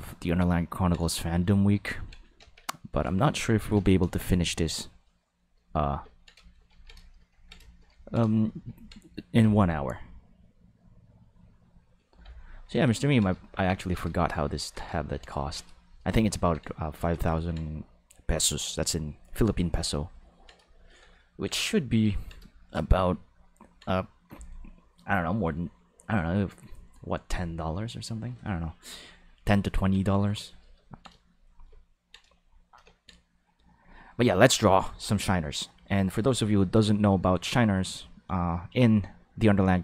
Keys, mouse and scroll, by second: 0.6 ctrl+shift+middle click, 2.4 ctrl+s, 15.8 shift+middle click, 16.3 ctrl+middle click, 17.3 ctrl+middle click, 20.1 ctrl+middle click, 20.7 shift+middle click, 21.1 ctrl+middle click, 22.0 ctrl+middle click, 22.5 shift+middle click, 23.2 ctrl+middle click, 30.8 ctrl+middle click, 31.3 shift+middle click, 31.7 ctrl+middle click, 32.4 shift+middle click.